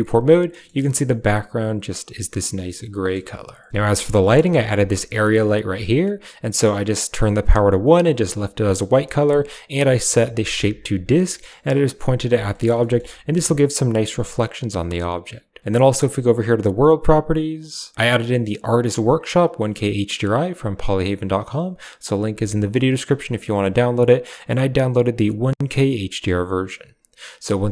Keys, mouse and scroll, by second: 0.5 middle click, 1.4 click, 2.1 drag, 2.9 KP_0, 4.3 shift+click, 5.3 shift+click, 9.0 shift+middle click, 10.2 click, 11.4 middle drag, 12.6 middle drag, 12.9 shift+middle click, 16.1 click, 16.7 click, 17.5 click, 18.4-21.8 drag, 24.3-26.6 drag.